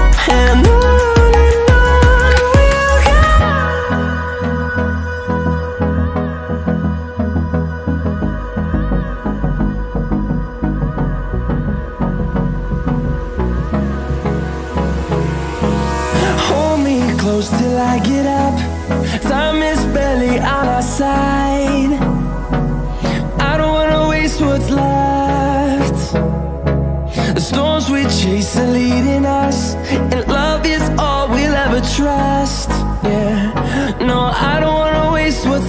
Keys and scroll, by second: 0.2 ctrl+d, 17.9 ctrl+d.